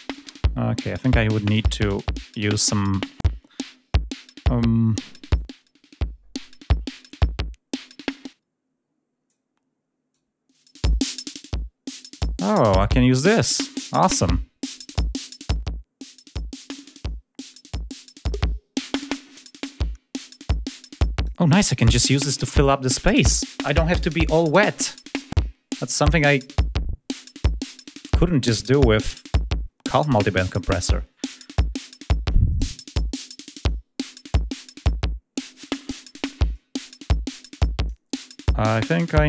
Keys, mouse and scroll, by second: 0.9 click, 1.5 click, 2.2 click, 6.2 click, 9.9 click, 15.2 click, 17.3 click, 26.2 click, 32.3 click, 33.4 click, 36.6-38.2 drag.